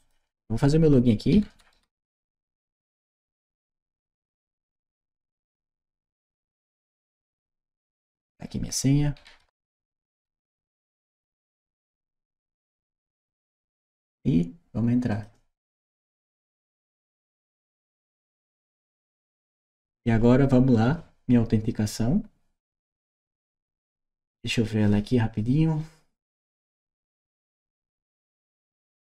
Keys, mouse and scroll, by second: 3.6-6.3 typing, 7.9 click, 9.0-11.0 typing, 14.1 6, 14.9 click.